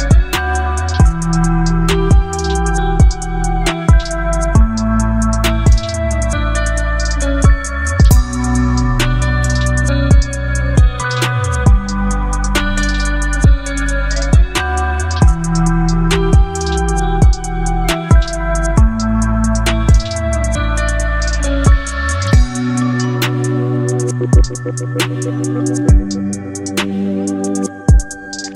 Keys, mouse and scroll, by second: 5.8-8.6 alt+drag, 9.2-10.2 click, 11.9 click, 13.2-13.8 click, 15.0-16.9 drag, 21.8-22.4 shift+drag, 23.9-25.1 shift+drag, 27.7-28.5 alt+drag.